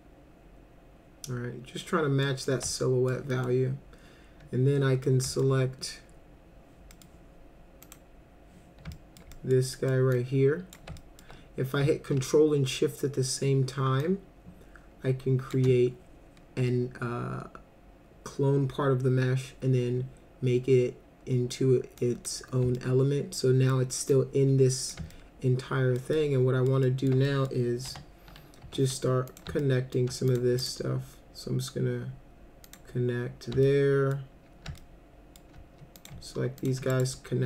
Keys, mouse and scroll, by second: 2.5-3.1 alt+middle drag, 3.3 middle click, 5.0 alt+middle click, 6.9 middle click, 7.8 click, 8.9 alt+middle click, 9.3 middle drag, 9.7 middle drag, 10.1-10.7 drag, 11.0 alt+middle click, 14.0-15.5 ctrl+shift+drag, 22.0 click, 22.8 alt+middle click, 24.1 click, 25.1 alt+middle click, 26.1 alt+middle click, 26.8 alt+middle click, 27.3 middle click, 27.9 F3, 28.6 1, 29.3 click, 29.6 alt+middle click, 30.3 ctrl+click, 30.6 right click, 32.7 click, 33.6 alt+middle click, 34.8 alt+middle click, 36.0 click, 36.6 ctrl+click, 36.9 right click.